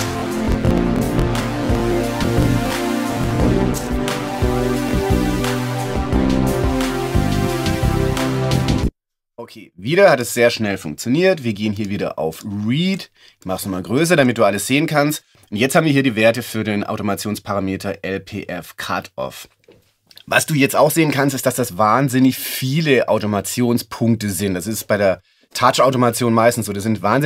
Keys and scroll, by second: 8.8 space.